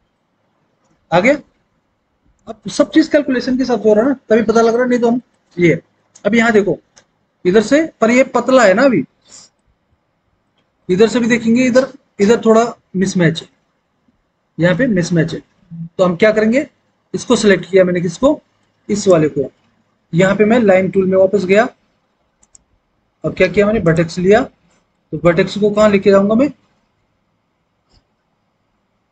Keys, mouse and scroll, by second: 16.4 s.